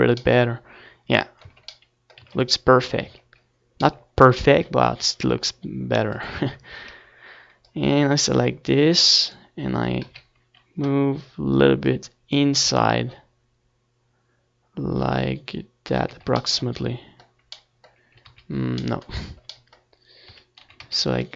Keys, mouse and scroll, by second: 0.2 c, 3.2-4.8 right drag, 3.9 KP_3, 5.9-8.6 drag, 10.6 z, 10.8 middle click, 12.7 ctrl+z, 14.7 a, 15.1 z, 15.2 c, 15.9 middle click, 16.8-18.7 right drag, 17.4-19.1 drag, 19.1 z, 19.3 a, 19.4 c, 21.2-21.3 right drag.